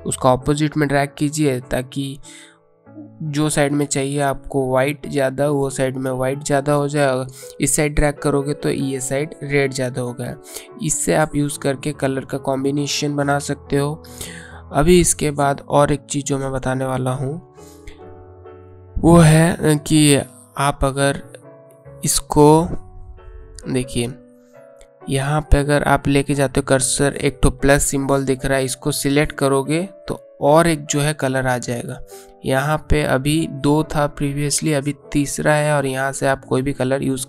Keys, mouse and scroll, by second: 5.3 click, 29.5 click, 33.5 click.